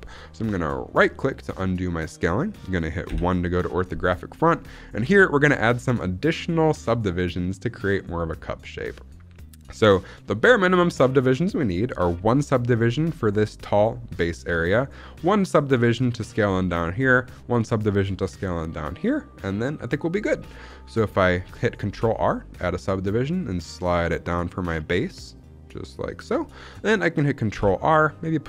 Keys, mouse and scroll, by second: 0.8-2.5 right drag, 3.0 KP_1, 5.0-6.0 scroll up 2, 21.8 ctrl+r, 26.0 click, 27.4 ctrl+r.